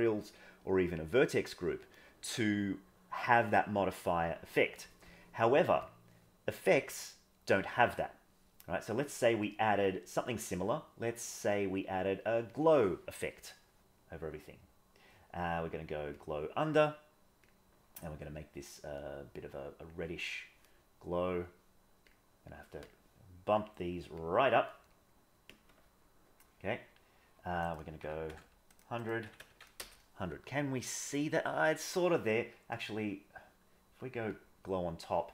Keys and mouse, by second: 9.9-12.6 drag, 17.4 click, 21.3 click, 22.5 click, 23.6 click, 24.1 click, 27.7-28.9 drag, 28.3 KP_0, 29.0 click.